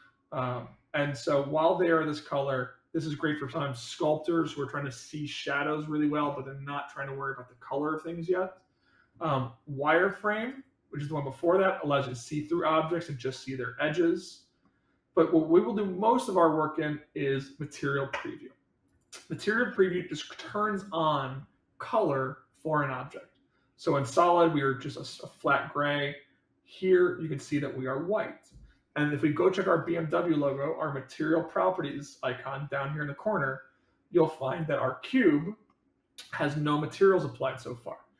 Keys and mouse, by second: 1.1-3.2 middle drag, 11.3-14.6 middle drag, 18.9 click, 19.5-21.3 middle drag, 24.0 click, 24.6-25.4 middle drag, 27.2 click, 35.6-36.6 middle drag.